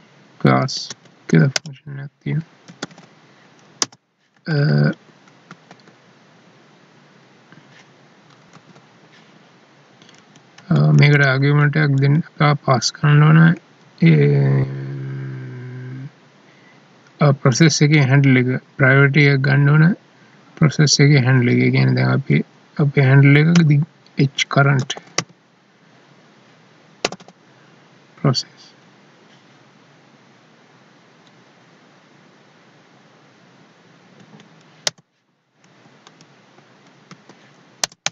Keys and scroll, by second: 0.6 Down, 0.9 Up, 4.3 Left, 5.5 ctrl+s, 8.5 Tab, 10.1 Right, 10.5 Left, 13.1 Right, 34.1 Down, 35.6 Right, 37.0 ctrl+s.